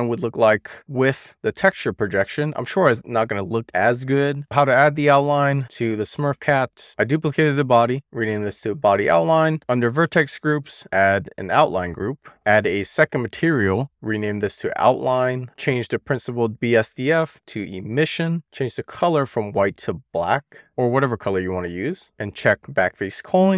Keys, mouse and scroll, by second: 2.2 click, 3.8 click, 4.4-4.7 scroll down 1, 4.7 click, 6.2 click, 8.0-9.5 drag, 9.5 scroll down 6, 10.1-11.9 drag, 10.7 typing, 13.0 click, 13.6 click, 14.2 click, 15.7-18.2 drag, 19.5 click.